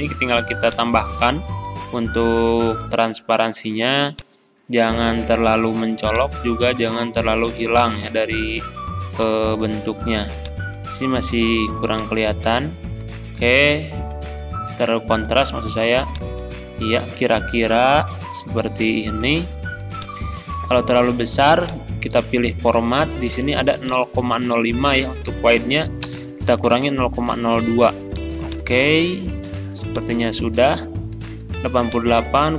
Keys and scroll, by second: 26.1 BackSpace, 26.7 3, 27.0 Return.